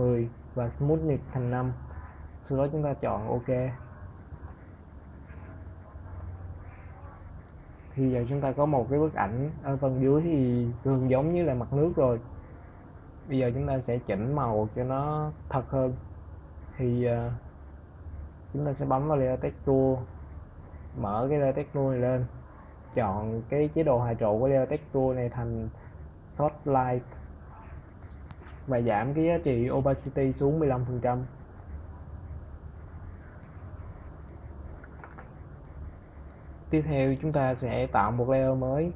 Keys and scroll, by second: 5.5 ctrl+0, 31.1 1, 32.3 Return.